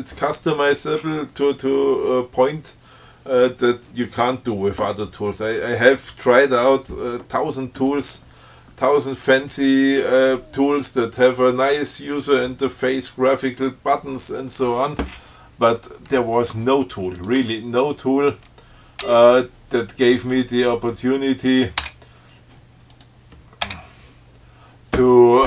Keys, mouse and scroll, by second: 17.4 click, 17.7 q, 19.3 ctrl+g, 20.4 click, 22.0 BackSpace, 23.2 click, 23.9 Return.